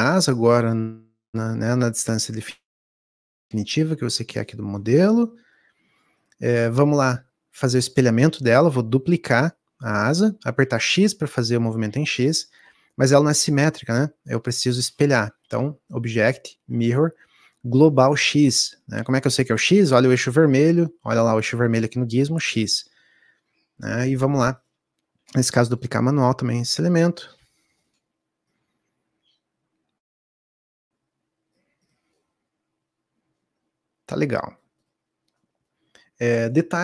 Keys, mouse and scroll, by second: 6.4 click, 10.5-14.8 middle drag, 14.8-19.0 drag, 23.7 shift+d.